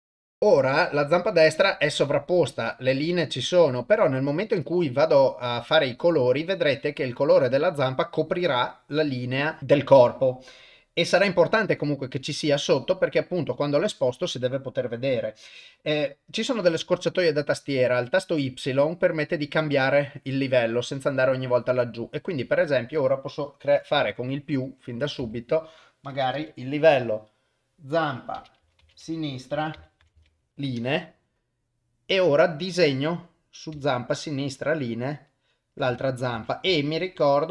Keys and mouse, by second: 24.8-30.7 drag, 33.7-35.7 shift+drag, 36.3 ctrl+z, 36.8-37.5 shift+drag.